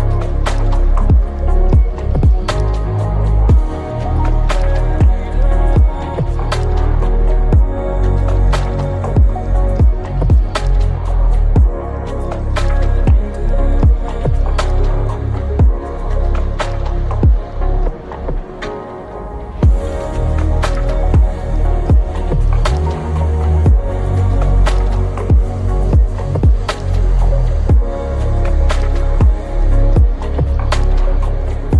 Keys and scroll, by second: 5.0-7.2 typing, 9.7 ctrl+s, 11.7 Up, 13.4 Left, 24.3 ctrl+s.